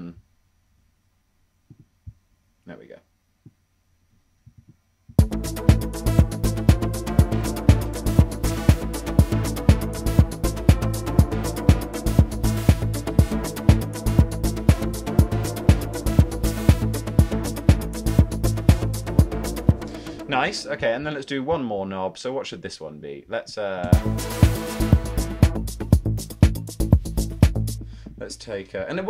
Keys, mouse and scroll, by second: 5.1 space, 6.6 ↺, 13.4 super+z, 19.1 ⟲, 19.6 space, 24.7 space, 28.6-29.0 typing.